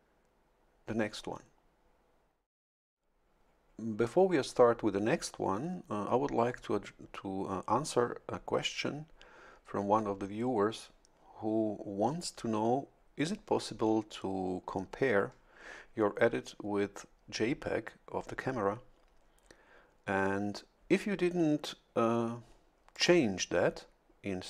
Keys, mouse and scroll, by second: 22.9 click.